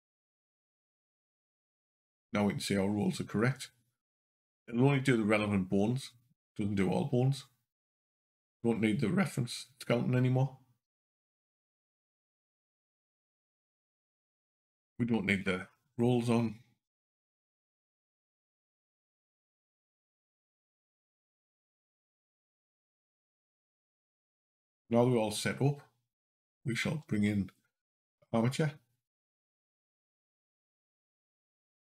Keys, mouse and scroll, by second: 10.8 click, 11.7 click, 13.3 h, 15.5-15.9 scroll up 2, 17.1 click, 17.6 scroll down 2, 19.2 click, 20.1 scroll down 2, 20.4 scroll up 2, 22.2 click, 22.6-23.3 scroll down 2, 23.3 click, 24.4 click, 26.6 shift+a.